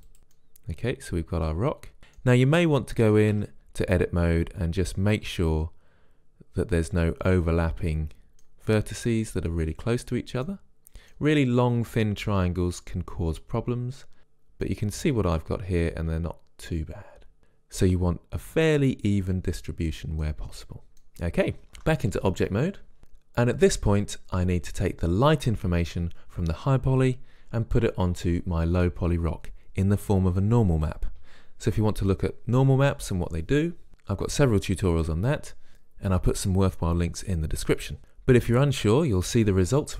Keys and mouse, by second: 0.2 click, 0.6 middle click, 1.0-2.0 middle drag, 3.6 Tab, 4.2 middle click, 9.0-14.2 middle drag, 22.0 Tab.